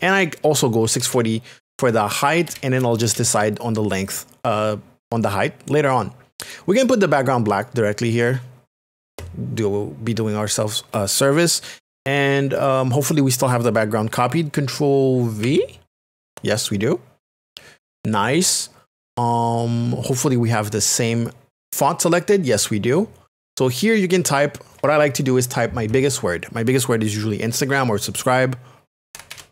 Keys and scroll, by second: 0.8 KP_6, 1.1 KP_0, 2.3 BackSpace, 3.1 KP_0, 15.4 ctrl+v, 28.8-29.5 typing.